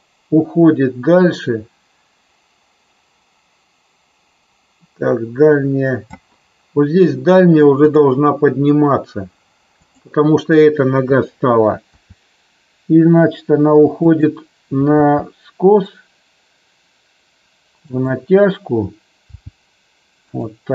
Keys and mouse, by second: 7.8 click, 9.7 click, 11.8 r, 14.9 g, 17.9 click, 19.3 g, 20.3 click.